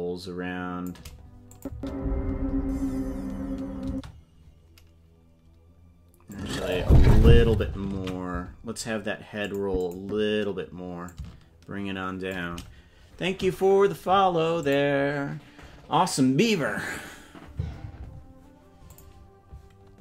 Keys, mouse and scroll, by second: 1.5-3.2 drag, 1.7 space, 3.8 space, 6.3 click, 8.4 ctrl+z, 9.4 click, 9.8 click, 11.1-12.3 shift+drag.